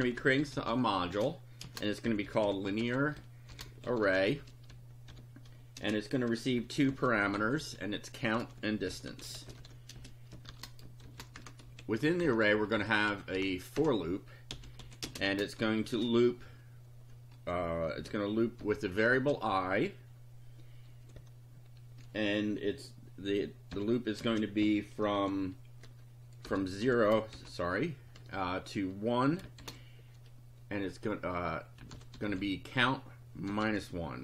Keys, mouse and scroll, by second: 0.0-11.8 typing, 11.4 shift+Return, 12.2 shift+Return, 12.5 shift+Up, 13.1 shift+End, 13.4 shift+Return, 14.3-15.8 typing, 17.9 space, 18.6 i, 19.1 space, 23.7 =, 24.2 space, 24.6 [, 25.8-28.2 typing, 29.6 shift+;, 31.6-34.2 typing.